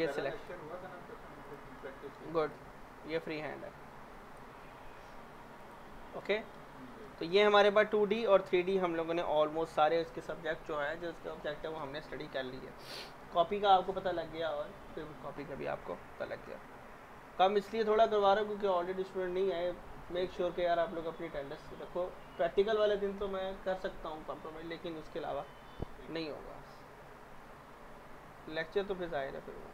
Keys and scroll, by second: 9.1 Delete, 9.3 z.